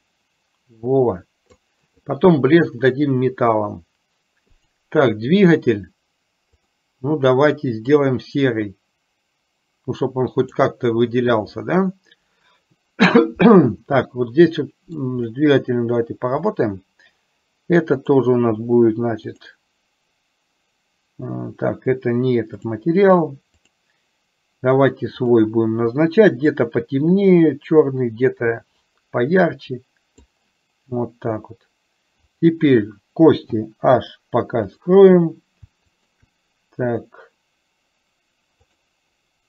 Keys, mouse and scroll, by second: 11.9-15.1 middle drag, 16.6 click, 18.1-19.7 drag, 22.7 click, 23.9 click, 24.4-25.4 middle drag, 25.4 click, 32.5 click, 34.9 click, 34.9 h, 38.7-39.4 drag.